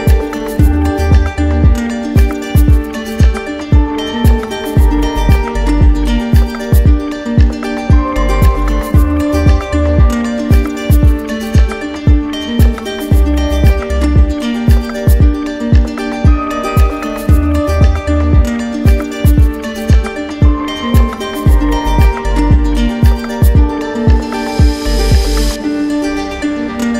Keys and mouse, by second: 1.5-2.6 drag, 2.9-3.9 drag, 5.1 click, 5.8 ctrl+d, 9.9 click, 14.2 click, 16.1-17.1 drag, 16.7 w, 20.7-21.7 drag, 22.1-23.1 drag, 25.0 click, 26.0 click, 26.5 shift+click.